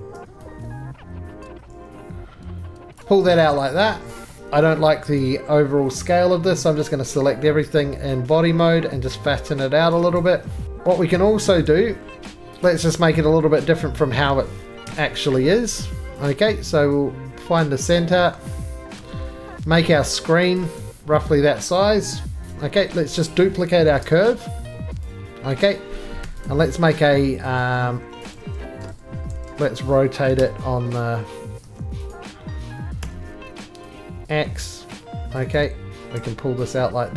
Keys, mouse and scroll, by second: 3.0 click, 3.2 right click, 3.5-4.5 scroll, 4.1 middle click, 4.3 shift+middle click, 4.4 middle click, 4.4 4, 5.2 click, 5.6-6.6 scroll, 6.7 middle click, 6.9 scroll, 7.1 middle click, 7.1 s, 9.7 scroll, 9.9 click, 10.2 right click, 10.6 shift+middle click, 10.6-11.1 scroll, 11.1 middle click, 11.6 shift+middle click, 11.9-12.2 scroll, 12.1 click, 12.7 click, 13.4 Escape, 14.0 middle click, 14.8 1, 16.3 click, 18.0 click, 19.0 c, 20.6 click, 20.8 right click, 21.1 middle click, 21.7 middle click, 22.0-22.4 scroll up 1, 22.4 click, 22.4 g, 22.5 right click, 22.8-23.3 scroll up 5, 23.3 middle click, 23.9-26.2 typing, 25.1 click, 25.1 right click, 25.4-26.0 scroll, 26.5 click, 27.5 scroll down 2, 28.2 middle click, 28.2 click, 28.3 z, 28.9 ctrl+z, 29.3 ctrl+z, 30.4 r, 31.6 2, 32.1 click, 33.0 r, 35.3 click, 35.6 right click, 35.7-36.7 typing, 36.7 click.